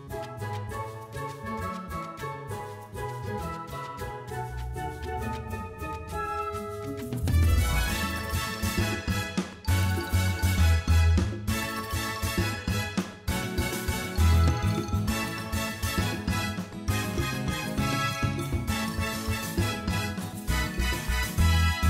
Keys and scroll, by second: 1.2 ctrl+r, 1.9 4, 2.2 Return, 7.8 s, 13.7 Tab, 15.7 g, 17.9 Tab, 18.8 1, 19.2 shift+z, 21.0 s.